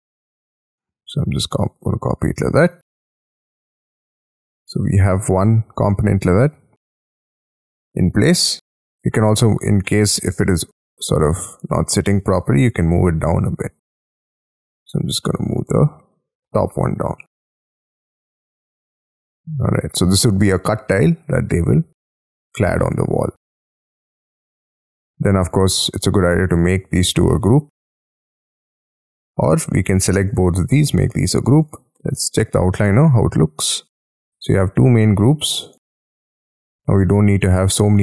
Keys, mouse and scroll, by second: 1.5 shift+click, 1.9-2.4 scroll down 11, 2.6 middle click, 3.3 space, 3.8 scroll up 6, 4.1 middle click, 6.1-7.1 scroll down 14, 7.1 middle click, 7.9-8.5 scroll up 12, 8.8 ctrl+click, 9.1 ctrl+double click, 9.8 middle click, 11.5-12.1 scroll up 6, 12.1 middle click, 12.7 m, 12.8-14.1 scroll up 9, 15.4 shift+click, 15.8 middle click, 16.3-17.4 scroll down 21, 17.2 space, 17.7 middle click, 21.0-21.5 scroll down 11, 22.1 scroll up 5, 22.5 scroll down 1, 22.7 shift+middle click, 23.0 shift+scroll down 1, 23.4 scroll up 6, 24.6-25.4 scroll up 5, 25.4 double click, 25.9 double click, 26.3 double click, 26.6 double click, 27.3 ctrl+click, 30.3 ctrl+click, 30.8 g, 31.6 double click, 32.7-34.8 scroll down 6, 34.8 double click.